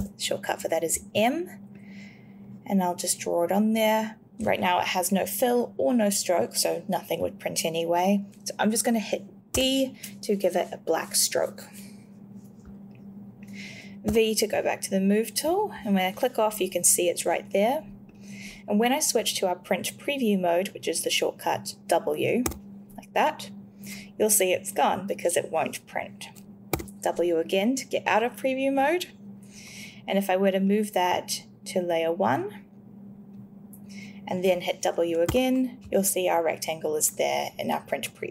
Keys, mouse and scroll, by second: 0.0 m, 9.5 d, 14.0 v, 15.3 click, 18.1 click, 22.4 w, 26.7 w, 35.3 w.